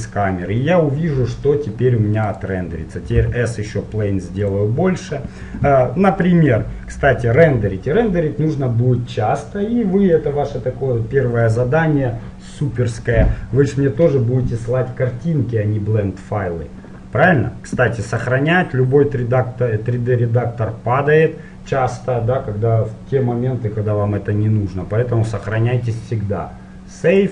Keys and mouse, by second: 2.5-4.6 drag, 3.5 s, 18.3-20.6 drag.